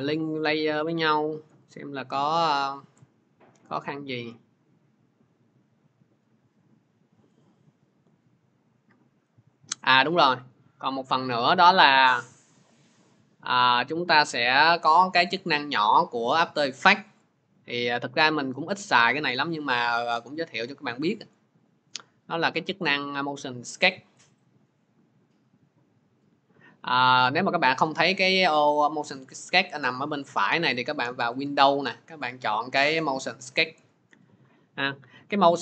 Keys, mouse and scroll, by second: 1.6 scroll, 3.6 scroll, 5.8-6.8 scroll, 8.0-8.4 scroll, 10.4 click, 11.7 click, 14.9 click, 19.7 click, 23.9-35.6 drag.